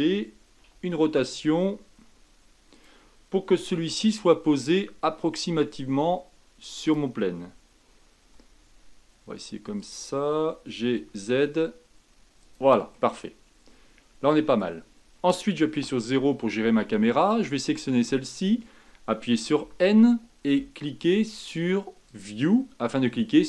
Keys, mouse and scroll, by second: 0.6 r, 3.7 g, 8.3 r, 10.4 g, 12.9-15.7 middle drag, 15.7 KP_0, 17.2 click, 19.5 n, 22.0 click.